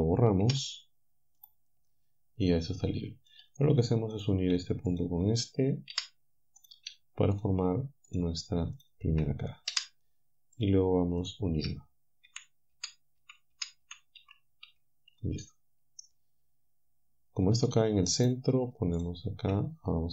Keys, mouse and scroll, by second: 0.5 Delete, 1.4 click, 2.5-3.5 drag, 4.2 click, 4.9-5.9 shift+drag, 5.9 f, 7.4 shift+click, 8.1 shift+click, 8.8 shift+click, 9.7 f, 12.3 f, 13.5 f, 15.4-17.8 drag, 19.0 shift+click.